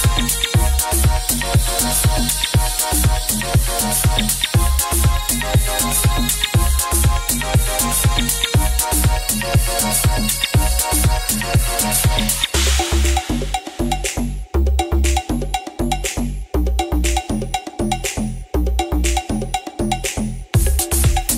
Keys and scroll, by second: 0.7 m, 2.6 ctrl+z, 3.0 ctrl+z, 4.6 ctrl+z, 12.6 ctrl+d, 16.7 ctrl+z, 18.7 ctrl+z, 19.3 ctrl+z.